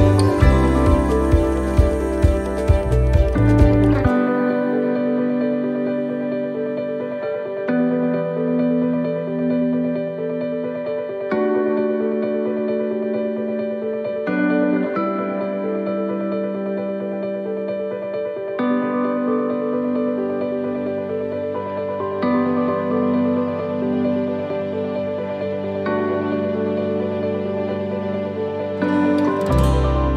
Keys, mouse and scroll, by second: 3.8 right click, 4.8 right click, 5.7 shift+middle click, 6.5 scroll down 4, 7.0 middle click, 7.8 scroll down 2, 8.2 shift+middle click, 8.8 scroll down 2, 9.2 shift+middle click, 9.9 middle click, 15.0 shift+middle click, 15.6-16.1 scroll up 3, 16.1 shift+middle click, 16.5 scroll up 2, 17.0 shift+middle click, 17.7-18.5 scroll down 2, 18.5 right click, 19.3 shift+right click, 19.8 scroll down 1, 23.3 shift+d, 25.2 shift+middle click, 26.1 click.